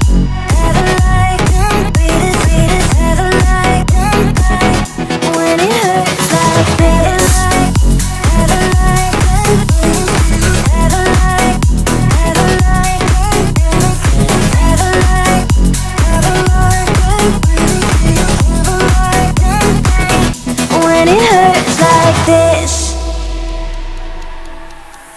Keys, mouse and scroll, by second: 7.7 click, 9.1 alt+scroll down 1, 10.5 alt+scroll up 1, 17.8 alt+Num_Lock, 17.8 alt+scroll up 1, 18.0-18.8 alt+scroll down 2, 18.8-19.2 scroll down 1, 19.2 click, 19.8-20.7 alt+scroll down 2, 20.7 alt+scroll up 1, 23.4-25.1 drag.